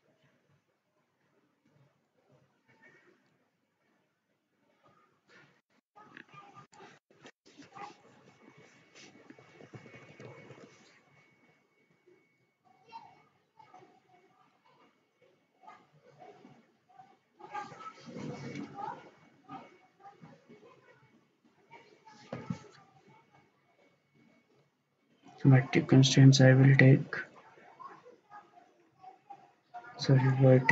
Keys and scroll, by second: 0.0 Escape, 6.1 ctrl+z, 9.5 Escape, 9.7 Escape, 9.9 Escape, 10.1 Escape, 10.2 Escape, 10.6 Escape.